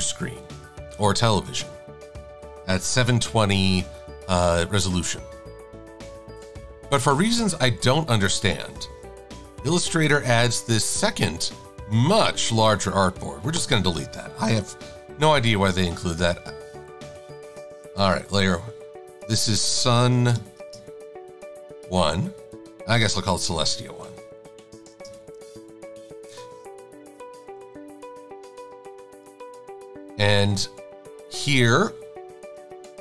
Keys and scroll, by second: 15.0 super+=, 23.5-24.9 typing, 25.4 Return.